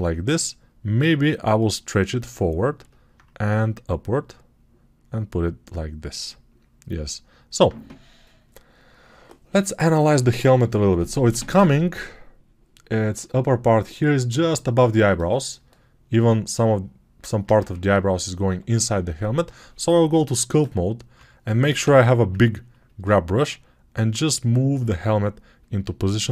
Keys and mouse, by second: 1.5-19.0 drag, 17.6 ctrl+Tab, 19.0-23.2 middle drag, 20.0 ], 20.5 ], 20.6-21.7 ], 21.7 g, 23.2-26.3 drag.